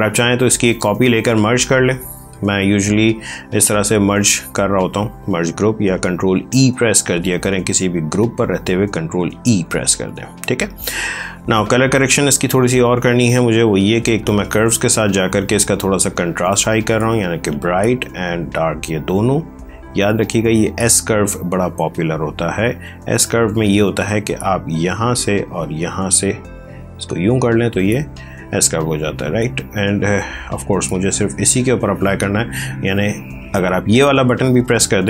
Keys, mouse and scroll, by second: 0.3 ctrl+j, 1.1 right click, 4.7 click, 6.1 ctrl+z, 9.2 ctrl+e, 11.9 ctrl+space, 12.9 click, 21.5 click.